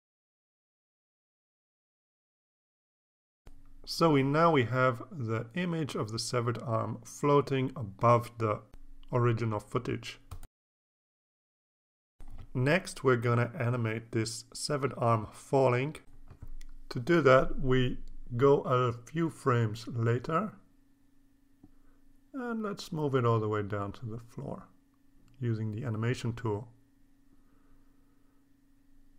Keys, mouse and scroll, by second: 0.5-2.0 drag, 3.3-7.4 drag, 8.1 scroll down 2, 8.7-9.1 scroll down 2, 9.4 scroll down 2, 10.4-11.0 typing, 10.6-12.4 drag, 12.8-13.5 scroll up 2, 14.5 space, 14.7 click, 15.0 space, 15.1 space, 18.7 click, 19.9 click, 22.0-25.5 drag, 27.2 click, 28.1 click.